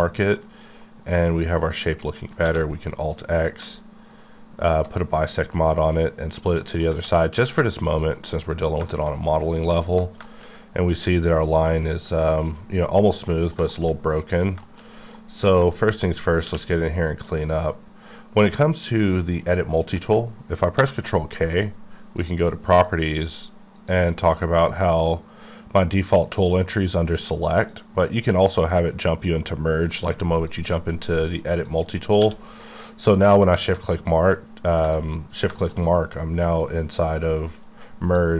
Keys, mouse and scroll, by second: 0.1 scroll down 1, 0.3 middle click, 2.0-2.4 scroll down 2, 2.4 alt+x, 3.1-4.1 scroll down 3, 4.1-4.5 alt+scroll up 1, 4.5-5.2 alt+scroll down 2, 5.3 alt+click, 5.9 middle click, 7.2 middle click, 8.0 middle click, 8.3-8.8 scroll up 2, 8.9 shift+middle click, 10.5-11.6 shift+scroll up 2, 11.6 shift+scroll up 1, 11.7 shift+middle click, 13.4 middle click, 13.6 shift+middle click, 14.9-15.6 scroll up 1, 15.6-16.4 shift+scroll up 3, 15.7 shift+middle click, 16.4 q, 20.2 ctrl+Num_Lock, 20.7 ctrl+k, 22.2 click, 22.8 click, 25.6 click, 27.7 click, 30.3 click, 32.2 q, 33.5 shift+click, 35.0 shift+middle click, 38.1 click.